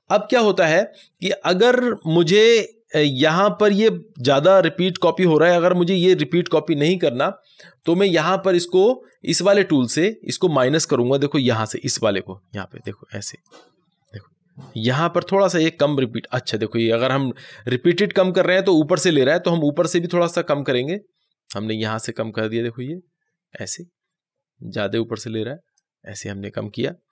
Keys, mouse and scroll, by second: 12.8-15.8 drag, 20.2-27.1 drag.